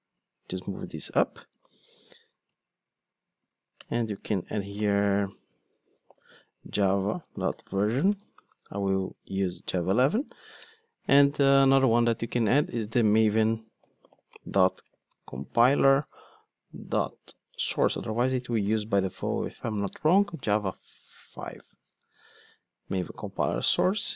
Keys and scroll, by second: 0.9 super+x, 1.6 super+v, 22.1 super+d.